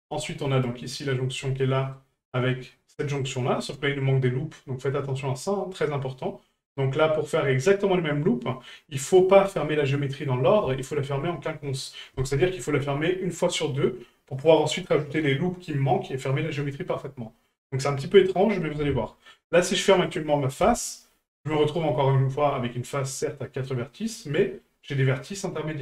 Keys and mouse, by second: 0.5 right click, 1.0 middle drag, 1.6-1.9 shift+middle drag, 3.2 shift+right click, 10.8 shift+middle drag.